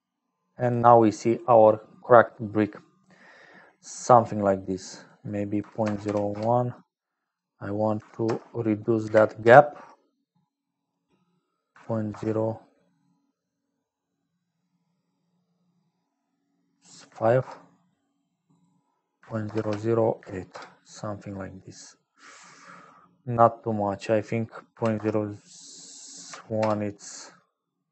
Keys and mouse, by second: 0.0-27.9 typing, 4.9-21.6 drag, 24.1-27.0 drag.